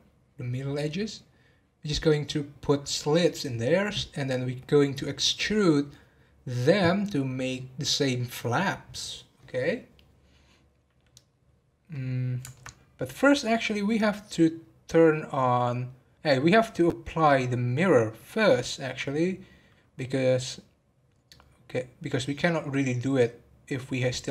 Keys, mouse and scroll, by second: 11.4 scroll down 1, 11.9-14.9 middle drag, 22.3-22.9 scroll up 4, 23.9-24.3 scroll down 4.